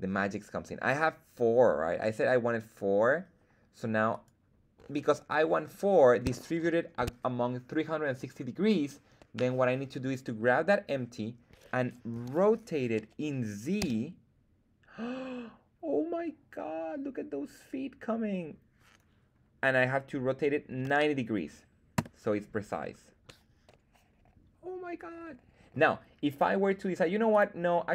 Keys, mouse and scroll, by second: 4.1 click, 4.1 right click, 5.8 scroll up 2, 6.6-6.9 shift+middle drag, 12.1 r, 13.7 z, 20.6 KP_9, 20.8 KP_0, 21.9 Return, 22.7-23.4 scroll down 2, 23.2-25.7 middle drag, 26.3 right click, 27.2-27.9 drag.